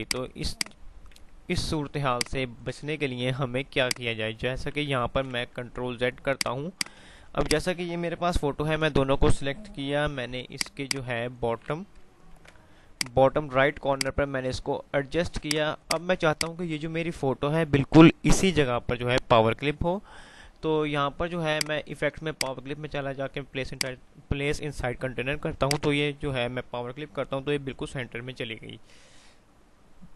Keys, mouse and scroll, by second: 0.2 click, 1.3 F3, 2.1 click, 2.1-2.6 typing, 2.3 F2, 3.1 F3, 4.5 F3, 5.7 F3, 5.7 typing, 6.5 click, 7.6 shift+click, 8.0 typing, 10.1-12.3 typing, 12.6 shift+Page_Up, 13.1 click, 13.6 F2, 15.5 click, 21.6 click.